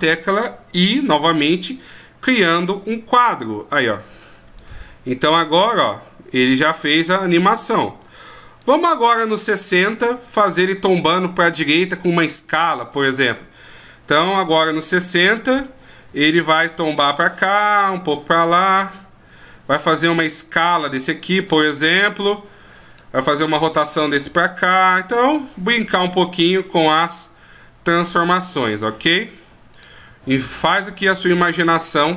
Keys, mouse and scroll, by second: 3.8 click, 13.0 right click, 16.1 r, 17.8 right click, 18.1 r, 19.7 right click, 20.8 s, 22.9 right click, 23.5 r, 24.7 right click, 25.3 r, 27.1 middle click, 29.7 right click, 30.0 r, 31.9 right click.